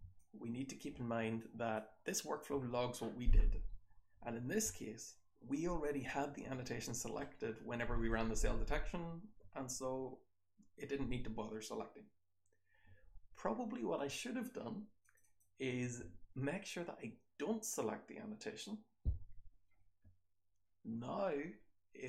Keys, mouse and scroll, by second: 0.2-0.7 drag, 15.0 click, 15.2 click.